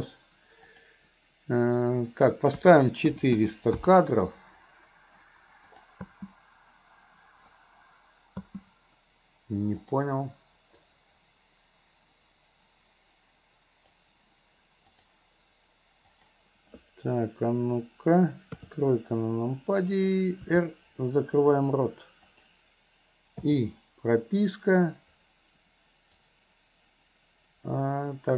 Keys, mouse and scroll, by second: 0.7-3.9 drag, 5.8 click, 6.1 space, 9.9 click, 10.9-14.0 drag, 15.1 drag, 16.1 click, 20.4 r, 26.3-28.3 drag.